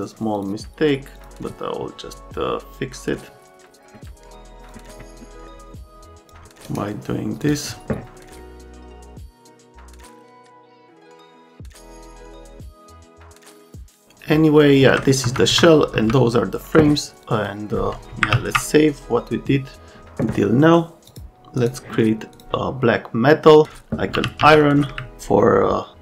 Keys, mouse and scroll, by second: 0.3 click, 1.1 click, 4.7 click, 5.1 click, 5.4 right click, 5.7 click, 6.6 scroll, 7.4 click, 8.5 click, 9.0 click, 17.4 click, 18.3 s, 21.1 click, 21.6 click, 22.3 click, 24.2 t.